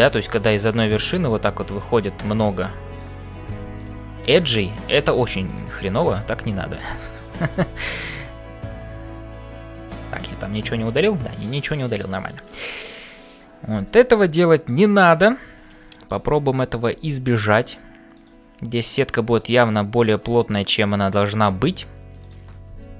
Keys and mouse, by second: 0.0-22.9 typing, 1.6 click, 2.9 click, 4.9 click, 5.4 click, 6.3 shift+click, 9.2-11.9 middle drag, 13.8 shift+middle click, 16.1 click, 19.3 click, 22.2 click.